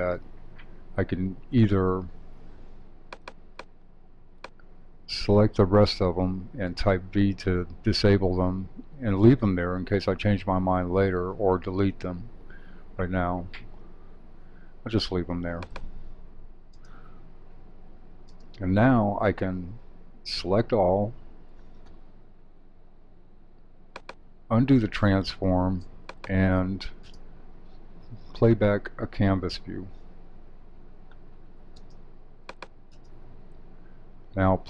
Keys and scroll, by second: 20.3 super+a.